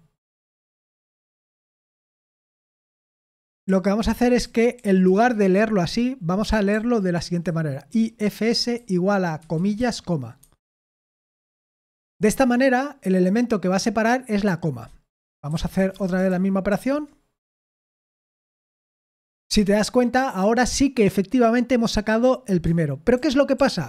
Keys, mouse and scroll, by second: 0.8-11.5 typing, 11.7 Escape, 15.2-16.3 typing, 16.3 ctrl+p, 16.7 ctrl+p, 17.6 ctrl+p, 18.4 Return, 23.1 ctrl+p, 23.6 ctrl+p.